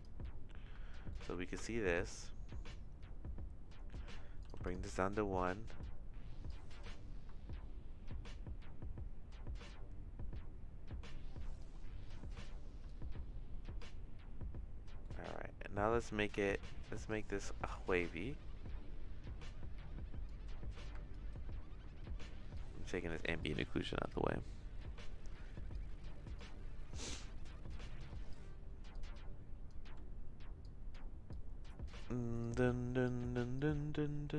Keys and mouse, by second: 1.2 middle click, 2.0 middle click, 4.4 click, 6.5-11.6 drag, 13.0 shift+click, 15.1 middle click, 17.1-20.2 drag, 21.1 ctrl+right click, 22.5 click, 23.4 click, 25.7 click, 27.1 middle click, 27.7 click, 28.9 click, 29.8 x, 30.6 click, 31.3 click, 32.4 click, 33.5-34.3 drag.